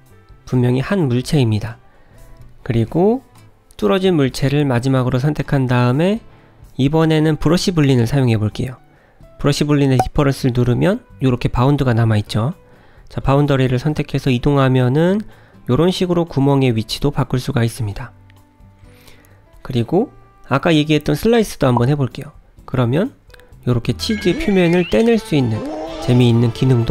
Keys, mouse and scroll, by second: 0.0 click, 0.4 g, 3.5 click, 3.9 click, 4.9 shift+click, 9.8 click, 12.2 click, 13.7 g, 17.1 ctrl+z, 17.9 ctrl+z, 19.4 click.